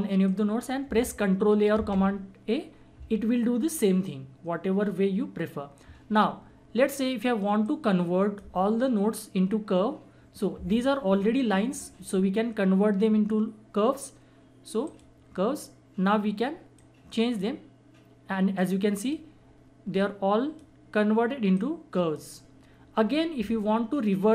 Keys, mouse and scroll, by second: 1.7 a, 7.6-10.9 drag, 14.9 click, 17.1-24.3 drag.